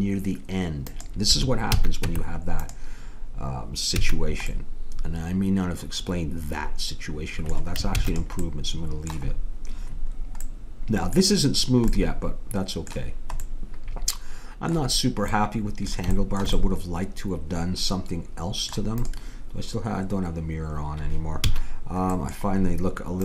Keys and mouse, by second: 1.7 a, 2.0 Tab, 4.0 a, 7.9 ctrl+s, 19.0-21.4 drag, 21.4 a.